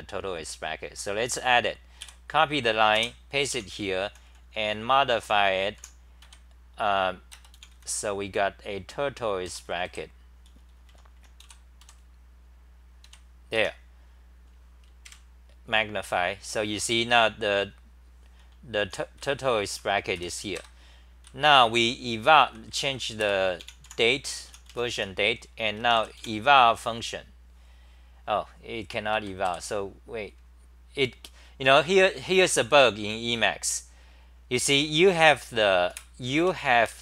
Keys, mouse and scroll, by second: 2.0-6.2 typing, 9.2-13.0 typing, 13.6 Home, 15.1 super+=, 16.8-17.8 scroll down 10, 18.5-23.2 typing, 22.8-23.8 scroll, 24.3-25.2 typing, 29.1 ctrl+g, 29.4 3, 34.7 u, 35.9 super+w, 36.4 Home.